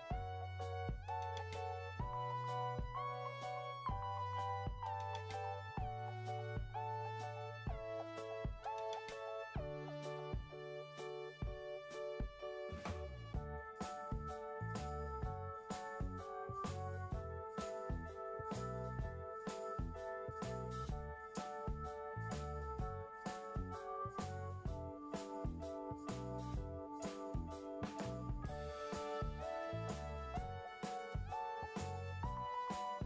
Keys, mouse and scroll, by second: 1.2 5, 1.4 Return, 7.5 Escape, 11.1 3, 11.3 Return.